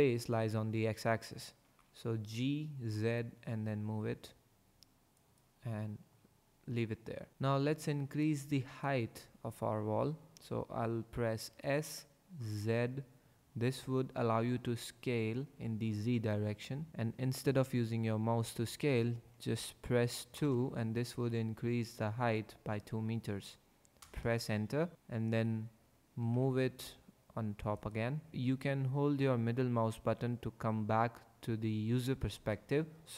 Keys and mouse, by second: 1.5 g, 1.8 z, 5.1 click, 11.5 s, 12.5 z, 16.9 z, 20.3 KP_2, 24.0 KP_Enter, 24.9 g, 24.9 z, 26.2 g, 26.3 z.